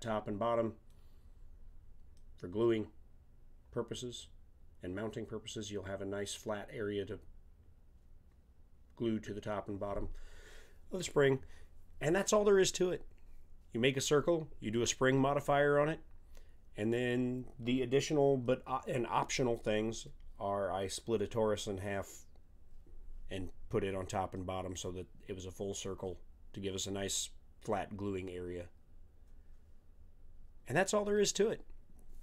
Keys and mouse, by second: 1.6-2.3 middle drag, 9.2-20.4 middle drag, 24.3-25.0 middle drag.